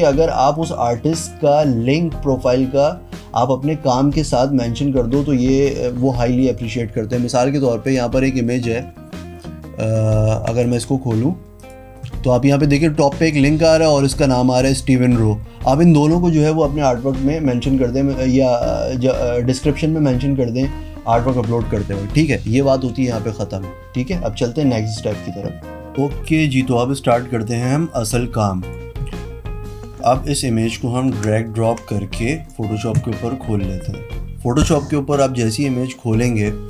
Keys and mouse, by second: 7.9 click, 10.6 click, 11.6 click, 13.0 click, 27.4 z, 28.1 click, 28.7 click, 30.2 click, 31.2 alt+Tab.